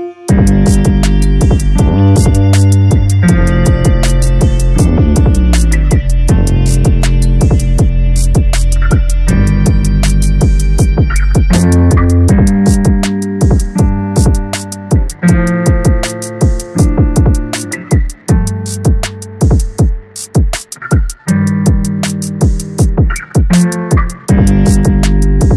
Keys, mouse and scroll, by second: 5.4-6.4 drag, 6.4 Tab, 7.0 Tab, 8.3 click, 12.2-12.9 scroll down 3, 12.4 Tab, 12.9 a, 13.1 a, 13.4-19.6 middle drag, 19.6 KP_0, 21.5-22.5 scroll down 10, 22.5-23.0 shift+middle drag, 23.0 scroll up 1, 23.9-24.4 scroll down 1, 24.4 click.